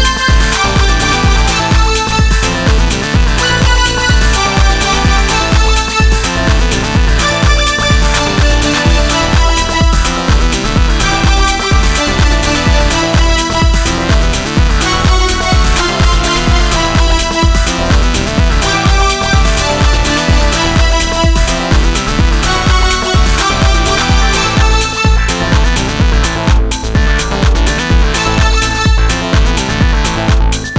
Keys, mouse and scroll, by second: 4.3 KP_1, 10.7 Tab, 12.4 Tab, 25.5 middle drag, 28.9-30.0 right drag.